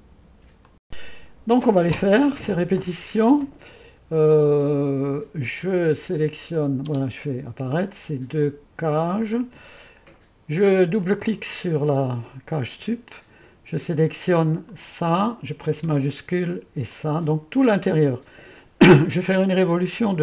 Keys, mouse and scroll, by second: 0.7-1.8 drag, 5.6-7.5 drag, 6.9 space, 11.0 click, 14.7-15.8 drag, 16.9-20.2 drag.